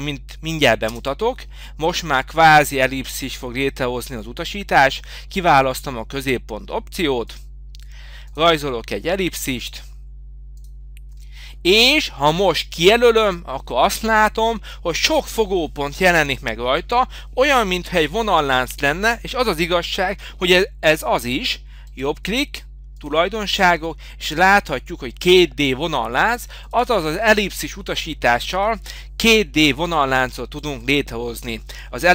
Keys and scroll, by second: 0.9 Return, 29.6 Escape.